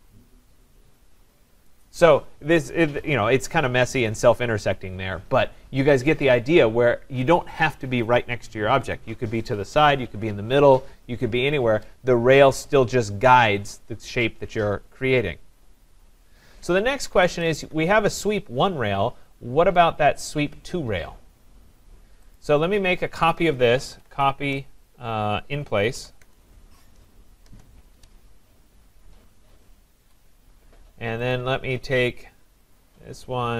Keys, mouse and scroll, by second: 1.7 right click, 3.5-5.3 scroll up 7, 5.4-5.8 scroll down 5, 5.8-6.8 scroll, 12.1-15.9 scroll, 17.2 Escape, 17.3 Escape, 18.7-21.3 scroll, 22.4 click, 23.3-23.6 scroll down 4, 23.4-26.5 typing, 27.5 Return, 30.0 Escape, 31.3 click, 32.7 click.